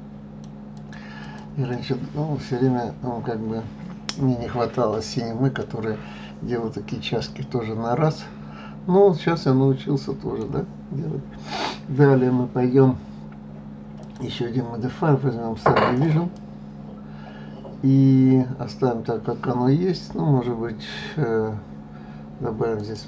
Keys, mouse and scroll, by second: 0.7 click, 1.7-4.7 middle drag, 7.3-10.2 middle drag, 14.0-17.0 drag, 22.8-23.0 drag.